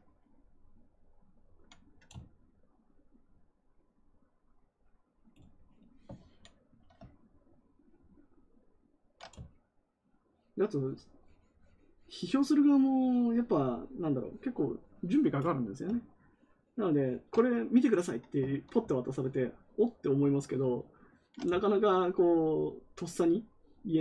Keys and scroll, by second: 6.1 ctrl+z, 18.4 ctrl+z.